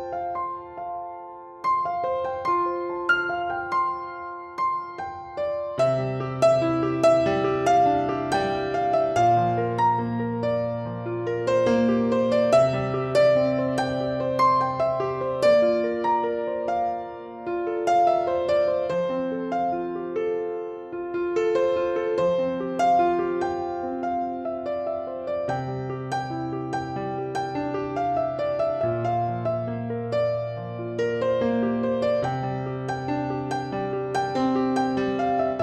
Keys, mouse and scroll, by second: 0.3 shift+d, 0.6 r, 1.5-2.8 drag, 2.7 shift+d, 3.0 r, 4.5 click, 5.2 scroll down 1, 5.3-6.4 middle drag, 5.8 scroll up 1, 6.4-7.4 drag, 7.0 scroll down 2, 7.1 scroll up 2, 7.7 click, 7.9-9.0 middle drag, 9.0-10.0 drag, 9.9 scroll down 1, 10.0-10.8 middle drag, 10.8 click, 11.3 scroll down 2, 11.3-12.9 middle drag, 12.9 click, 13.1 middle drag, 13.3 click, 13.7-15.1 middle drag, 15.1 click, 15.6 click, 15.9-16.7 middle drag, 16.7 click, 17.1-18.1 middle drag, 18.1 click, 18.5 click, 18.9 scroll down 2, 18.9-21.9 middle drag, 19.6 scroll down 1, 20.2 scroll up 1, 21.3 shift+d, 21.9 click, 22.7 middle click, 22.9 r, 23.4 click, 23.7 s, 24.1 click, 24.1-24.8 scroll down 1, 24.8 click, 25.3 scroll down 1, 25.4-26.1 middle drag, 25.7 scroll up 1, 26.1-27.7 drag, 27.7 scroll down 2, 27.7-29.9 middle drag, 28.6-28.9 scroll up 2, 28.9 Tab, 29.3 scroll up 1, 29.5 alt+z, 29.9 click, 30.3 shift+click, 31.1 s, 31.7 click, 31.9 alt+z, 32.0 scroll down 1, 32.1-33.1 middle drag, 32.8 s, 33.1 click, 33.5-34.3 middle drag, 33.9 Tab, 34.3 click, 34.8-35.6 middle drag, 35.3 scroll down 1.